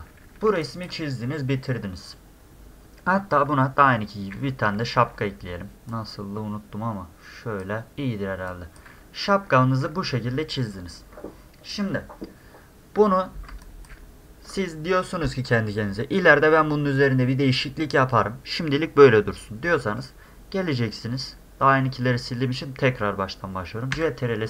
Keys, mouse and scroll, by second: 0.2 middle click, 0.4 space, 0.6 drag, 4.8 middle click, 5.9-7.6 drag, 8.1 scroll down 4, 8.3 space, 8.5-8.8 drag, 9.6 scroll up 2, 9.7 middle click, 12.8-13.2 scroll down 4, 13.7 ctrl+click, 16.2 scroll up 2, 17.3-18.3 scroll down 2, 18.3-18.6 scroll up 2, 24.0 ctrl+s.